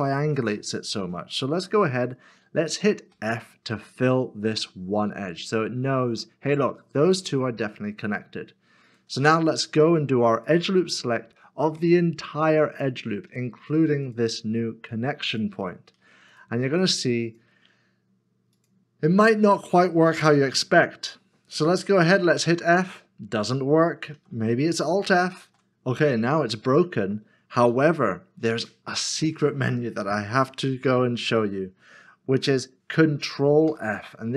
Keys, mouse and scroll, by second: 10.5 alt+click, 11.8 alt+shift+click, 14.1 shift+click, 15.3 shift+click, 16.3 alt+shift+click, 17.3 alt+shift+click, 18.5 alt+shift+click, 18.6 alt+shift+click, 20.5 middle click, 22.7 f, 24.1 ctrl+z, 25.4 alt+f, 26.3 middle click, 28.3 ctrl+z, 33.7 ctrl+f.